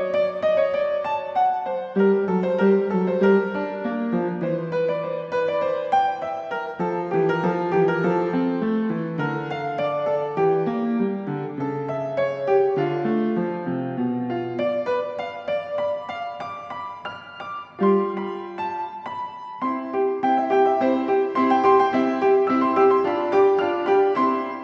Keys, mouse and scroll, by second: 0.1 click, 0.8 click, 2.2-2.9 typing, 3.7 Return, 4.7-5.0 ctrl+scroll, 5.4 ctrl+scroll, 5.4 Escape, 5.9 s, 7.0 click, 8.0 click, 9.6 click, 10.7 Escape, 11.3 s, 12.1 click, 15.4 click, 16.5 click, 17.0 Escape, 18.6 click, 19.7 click, 23.6 click.